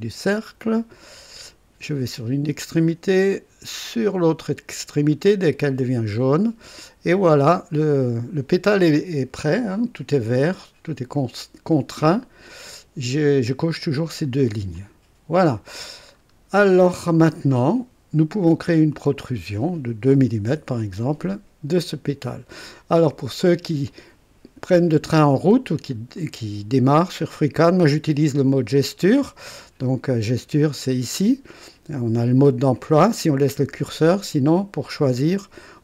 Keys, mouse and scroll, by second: 1.4 click, 5.6 click, 14.7 click, 16.1-16.5 scroll up 1, 18.9 click, 20.1 KP_2, 20.4 KP_Enter, 20.4 Return, 21.9 click, 23.0 right click, 23.8-25.2 drag, 25.7 scroll up 1, 26.1-27.1 right drag, 34.1 click.